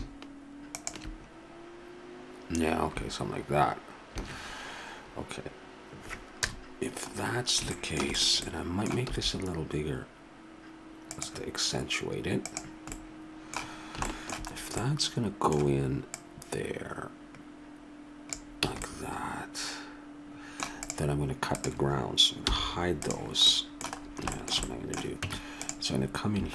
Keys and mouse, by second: 0.8-2.1 drag, 4.6 shift+z, 6.4 KP_0, 9.0 s, 12.9-14.1 middle drag, 14.9-16.1 middle drag, 16.1-18.0 drag, 18.7 a, 18.8 middle click, 20.3 middle click, 20.8-21.8 right drag, 22.4 h, 23.5 middle click, 24.0 middle click, 25.2 Tab.